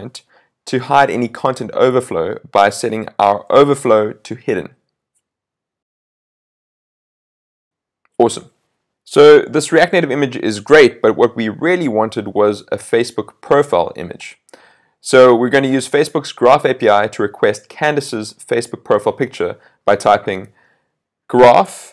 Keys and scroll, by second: 6.8 super+s.